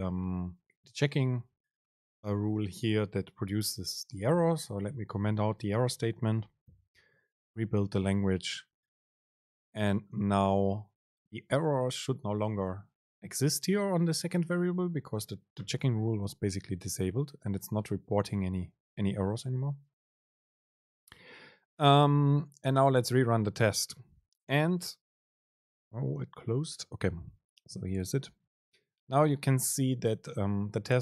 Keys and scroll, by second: 7.0 ctrl+shift+super+F9, 23.5 super+r.